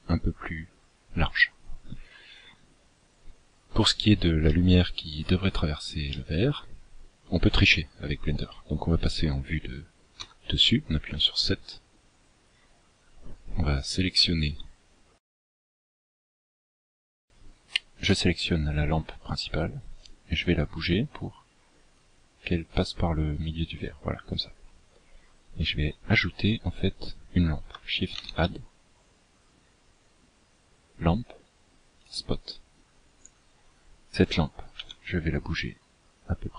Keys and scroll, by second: 9.2 KP_7, 13.4 Tab, 27.0 shift+a, 33.6 g.